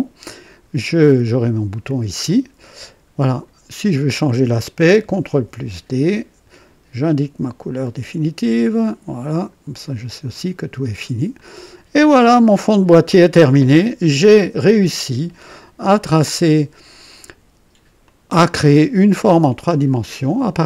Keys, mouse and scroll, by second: 0.4 click, 2.2-3.6 drag, 4.1 click, 5.3 ctrl+d, 7.0 click, 8.4 click, 9.3 click, 10.3 click, 10.8 click, 11.3-12.7 drag, 13.1 click, 14.7 scroll down 1, 15.4-17.2 drag, 18.0-19.4 drag, 19.6 click.